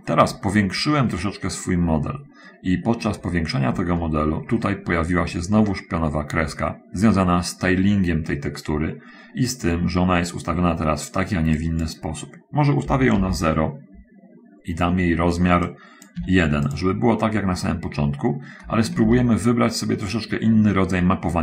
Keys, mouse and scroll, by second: 1.0-1.4 scroll up 2, 2.5-2.8 scroll up 2, 4.0 shift+middle click, 9.2-9.6 scroll up 2, 11.5 click, 13.0 0, 13.1 Return, 16.0 click, 16.2 1, 17.0 click, 19.0 ctrl+z.